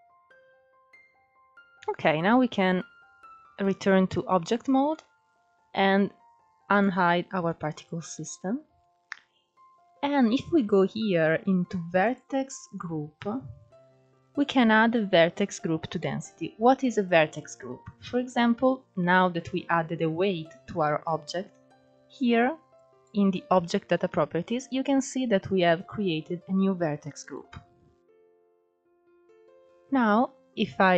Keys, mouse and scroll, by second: 2.3-4.1 shift+middle drag, 4.1 click, 4.8-6.5 middle drag, 6.5-7.0 scroll down 11, 9.4-10.1 drag, 10.1-10.9 scroll down 3, 10.9 scroll down 2, 14.7-16.5 middle drag, 16.5 scroll up 2, 17.1-17.8 scroll down 1, 17.8 scroll down 1, 20.1 click, 24.4-27.6 drag, 27.9 l, 29.0 l, 29.6-30.9 drag.